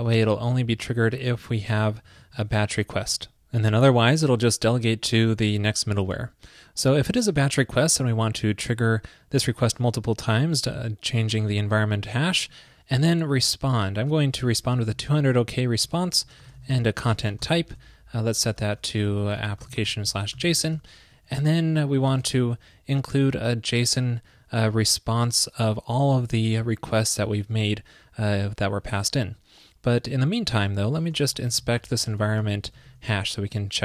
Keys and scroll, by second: 1.2 super+v, 2.5 super+Right, 18.7 ctrl+l, 33.0 super+s.